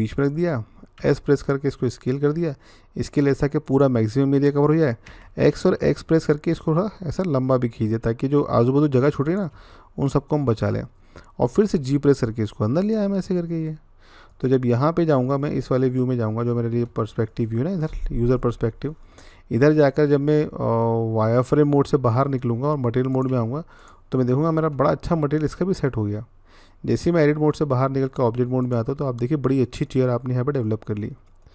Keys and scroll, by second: 0.8 s, 4.9-5.3 typing, 9.3 x, 11.5 g, 22.1-22.9 z.